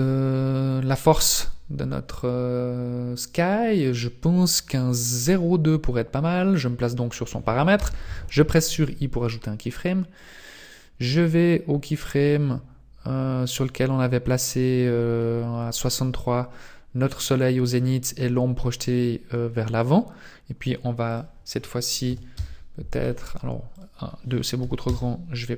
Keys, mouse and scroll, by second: 7.9 i, 10.3 click, 11.3 click, 21.3 click, 23.9 click.